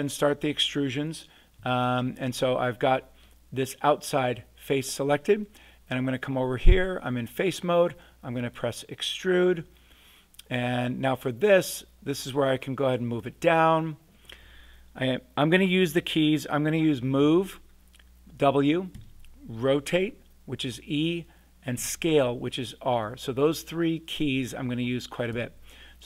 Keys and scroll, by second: 17.2 w, 18.7-19.4 typing, 21.7 r, 25.3 e.